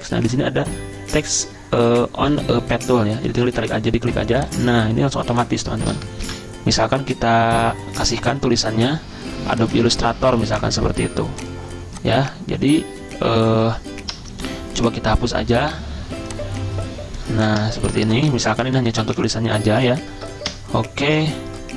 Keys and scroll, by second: 6.2 ctrl+v, 14.2 BackSpace, 14.5 BackSpace, 17.6 BackSpace, 17.8 Delete, 18.0 Delete, 18.1 Delete, 18.2 Delete, 18.3 Delete, 18.4-18.8 Delete, 19.1 Delete, 20.0 ctrl+shift+Down, 20.5 BackSpace, 21.3 ctrl+shift+Down.